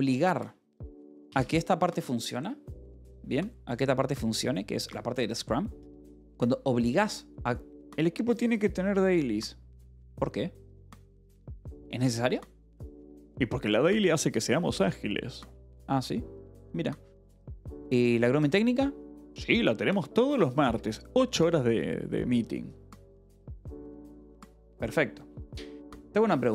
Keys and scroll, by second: 1.8 shift+v.